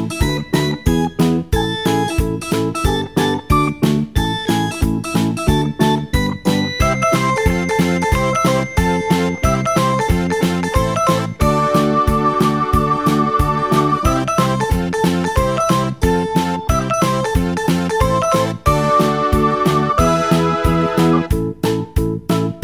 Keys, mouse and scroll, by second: 4.2 s, 6.2 s, 10.6 scroll down 1, 11.4 s, 14.4 s, 15.9 g, 20.5-21.7 scroll up 4, 21.7 g.